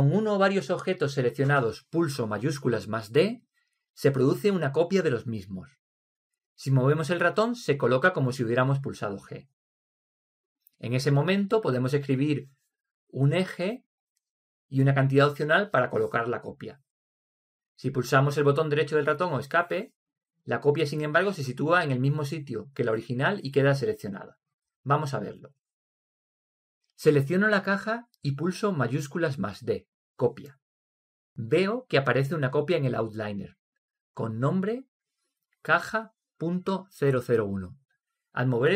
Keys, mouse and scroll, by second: 27.6-29.5 middle drag, 31.1 shift+d.